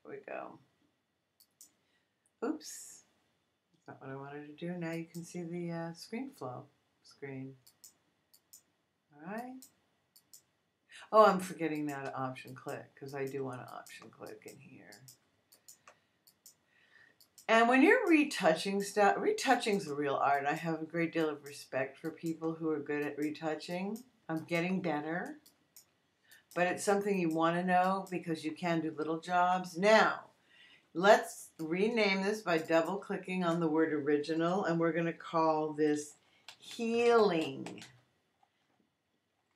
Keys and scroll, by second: 36.2-38.1 typing.